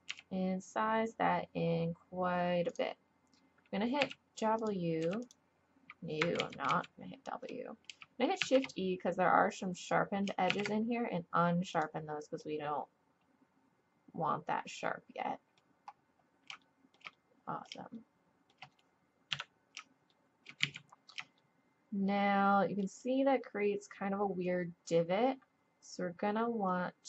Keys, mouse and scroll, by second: 0.1 s, 4.0 w, 5.0 w, 6.4 ctrl+z, 6.7 ctrl+z, 8.4 shift+e, 10.5 shift+e, 12.4 middle click, 13.9-15.1 middle drag, 15.9 middle click, 16.6 click, 16.7 middle click, 16.8 click, 17.2 middle click, 18.2-19.3 middle drag, 19.3 KP_3, 20.6 z.